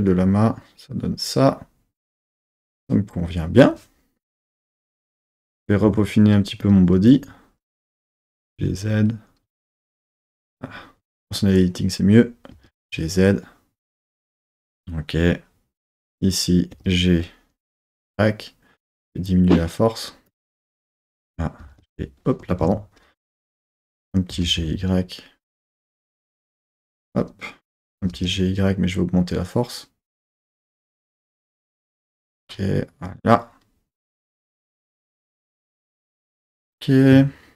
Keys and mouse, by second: 4.4 KP_3, 5.9 1, 6.6 click, 8.3 g, 8.5 z, 9.6 click, 10.2 super+z, 11.1 click, 11.5 click, 12.5 g, 12.7 z, 14.3 click, 15.9 click, 16.7 g, 17.7 y, 20.3 click, 20.9 click, 21.6 h, 21.8 y, 22.6 super+z, 23.3 super+z, 24.3 g, 24.6 y, 25.9 click, 26.9 click, 28.0 g, 28.3 y, 32.3-34.6 drag, 34.6 z, 35.5 z.